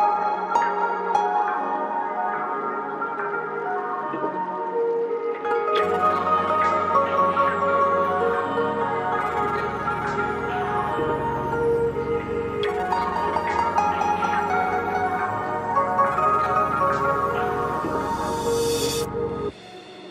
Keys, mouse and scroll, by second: 0.1-0.5 scroll up 1, 1.6-4.6 drag, 4.6 scroll down 1, 7.3 scroll up 1, 8.4-12.2 drag, 15.9 click, 17.4 shift+Page_Down, 18.6 click.